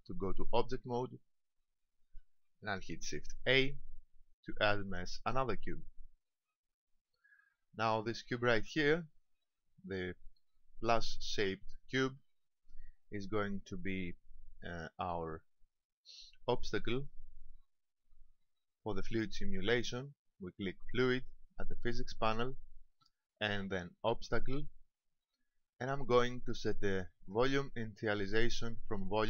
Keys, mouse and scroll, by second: 0.9 Tab, 3.7 shift+a, 9.3 right click, 15.7 click, 16.9 click, 19.1 click.